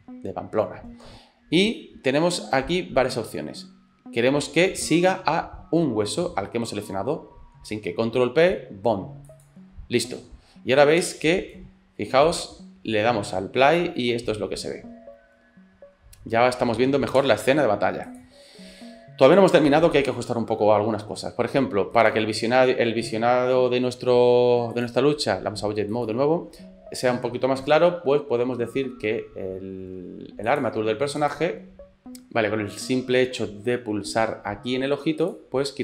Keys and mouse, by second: 11.0 space, 11.8 middle click, 17.2 space, 18.1 click, 22.3-26.2 drag, 30.5 click, 35.3 click.